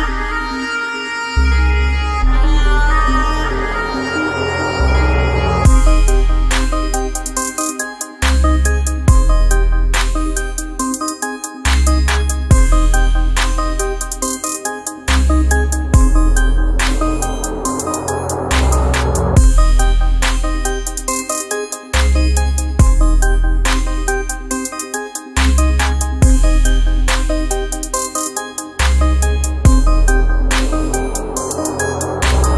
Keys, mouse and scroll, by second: 1.6-5.2 drag, 6.2 space, 18.9 click.